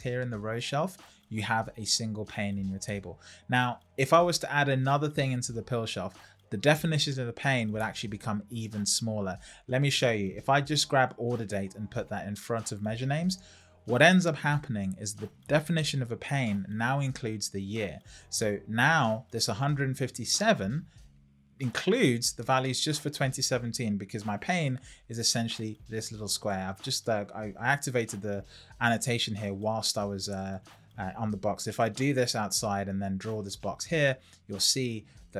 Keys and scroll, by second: 27.4 Escape.